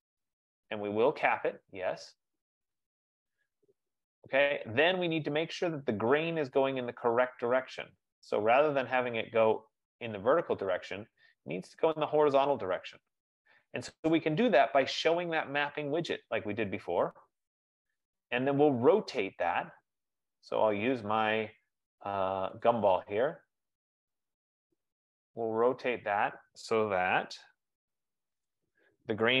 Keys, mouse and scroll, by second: 1.5 click, 6.1-6.5 scroll, 7.1-7.5 scroll, 11.0-11.5 scroll, 14.1 scroll, 16.4 click, 22.4 F15, 22.9 click, 28.8 shift+click.